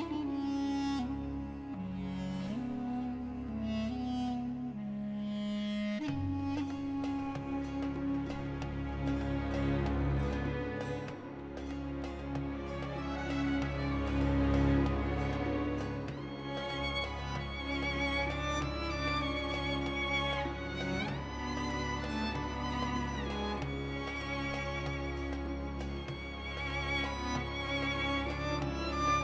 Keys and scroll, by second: 2.2 ctrl+b, 13.8 u, 18.1 shift+s, 20.2 Tab, 20.8 shift+a, 25.0 r, 25.7 x, 26.0 9, 26.2 0, 26.7 Return.